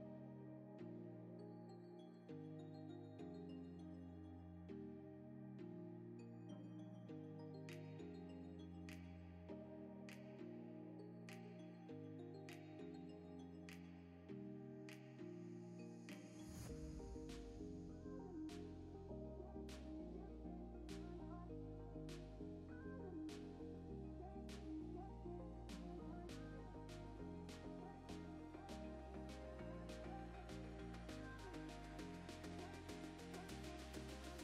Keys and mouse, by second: 0.1 click, 1.2 click, 1.7 middle click, 2.1 middle click, 3.8 ctrl+z, 3.9 ctrl+z, 4.2 ctrl+z, 4.4 click, 6.3 Tab, 6.4 3, 7.4-8.5 drag, 8.8 click, 9.1 ctrl+c, 9.4 click, 9.7 ctrl+v, 10.0 click, 10.6 Tab, 10.7 click, 10.9 ctrl+s, 11.0 middle click, 11.3 middle click, 11.4 middle click, 11.8 click, 12.2 Tab, 12.3 3, 12.6 ctrl+KP_6, 12.8 ctrl+KP_Add, 14.1 click, 14.5 click, 15.4 Tab, 15.7 click, 16.4 click, 17.1 ctrl+s, 17.3 Tab, 17.4 3, 17.5 click, 22.3 click, 22.6 click, 23.3 click, 23.9 Tab, 24.2 ctrl+s, 24.4 middle click, 25.1 shift+middle click, 26.0 click, 26.4 click, 27.9 Tab, 28.0 3, 28.1 click, 28.4 ctrl+KP_Add, 28.4 ctrl+KP_Add, 29.5 click, 30.3 click, 30.9 Tab, 31.1 Tab, 31.4 middle click, 31.7 KP_3, 31.9 shift+middle click, 32.5 middle click, 33.1 shift+middle click, 33.4 click, 33.7-34.4 shift+drag.